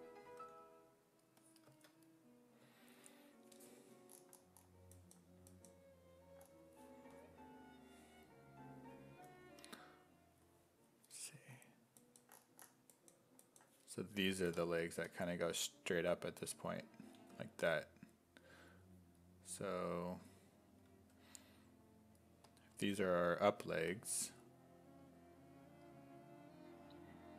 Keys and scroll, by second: 0.4 w, 17.3 w.